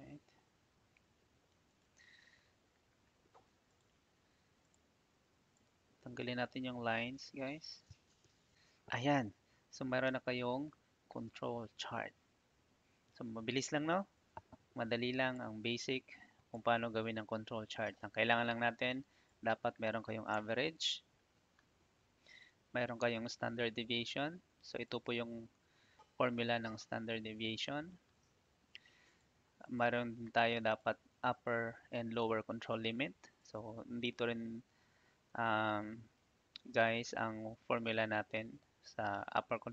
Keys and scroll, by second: 7.4 Delete, 20.3 Tab, 27.7 Escape.